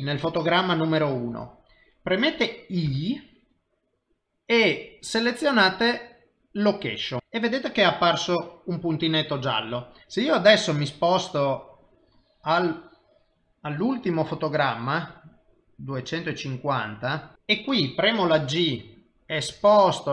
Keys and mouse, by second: 10.0 ctrl+z, 11.7 click, 18.6 g.